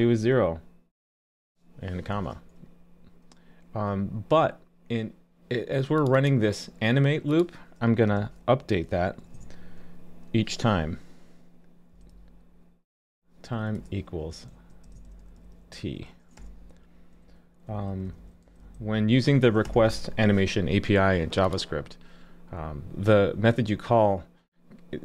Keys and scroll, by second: 2.1 super+s.